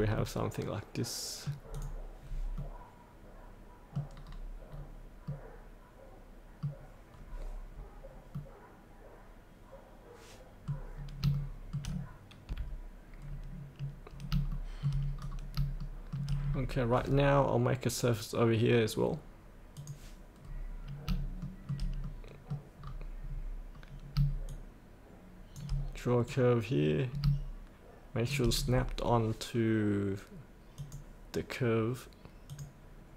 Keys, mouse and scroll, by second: 0.2-1.4 middle drag, 1.7 click, 2.2-2.6 scroll up 1, 2.6 middle click, 4.2-5.2 scroll down 1, 5.2-7.6 middle drag, 7.7-8.3 scroll up 2, 8.3 middle click, 8.6-11.2 middle drag, 11.3 shift+middle click, 12.5 F8, 13.2-14.3 scroll down 1, 14.5 shift+middle click, 15.2-15.6 scroll down 1, 15.8 shift+middle click, 16.5-19.8 scroll down 1, 19.8 click, 20.4 scroll up 1, 22.0 middle click, 22.8 scroll down 1, 24.5 shift+click, 26.3-28.3 drag, 30.8 click.